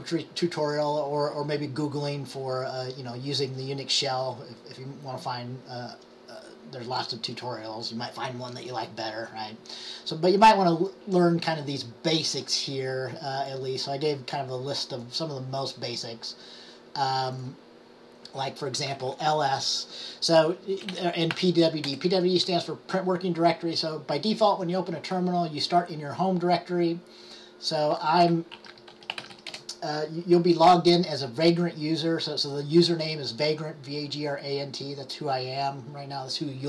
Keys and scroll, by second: 20.7-21.9 typing, 28.4-29.9 typing.